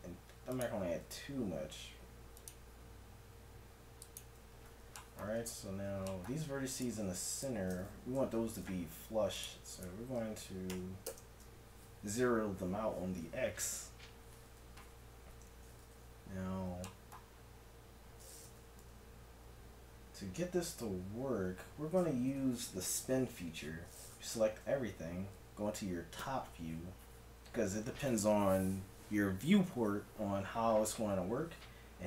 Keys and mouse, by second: 0.5-2.3 drag, 2.5-5.8 drag, 5.8 middle click, 6.8-8.1 drag, 8.1 n, 9.0 click, 11.1 click, 15.3 n, 18.8 a, 22.3 t, 24.7 a.